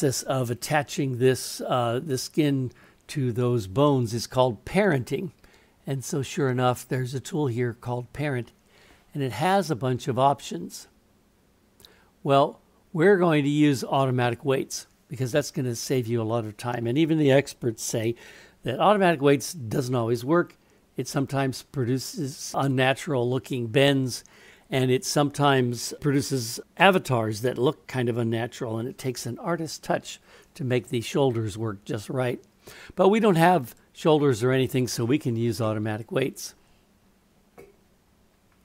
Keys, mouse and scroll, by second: 4.8-33.9 drag.